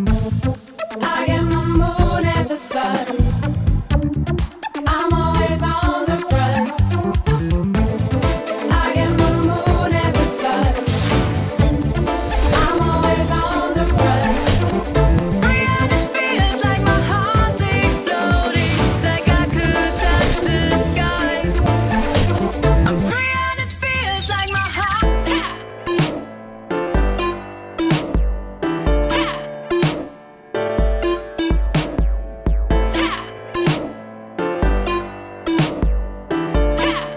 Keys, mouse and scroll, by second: 2.0 drag, 2.6 drag, 3.1-4.3 drag, 4.6 scroll up 1, 4.7-6.5 drag, 4.7 middle click, 6.6-10.5 drag, 10.5-11.3 drag, 12.4 click, 13.1 click, 13.3-15.2 drag, 15.2-15.9 scroll up 5, 15.6 click, 15.9-17.4 drag, 16.3 scroll down 1, 19.8 click, 20.2 scroll down 1, 21.3 click, 21.8 click, 26.4 click, 26.5-27.9 scroll down 3, 28.9-29.8 drag, 32.1-37.1 drag.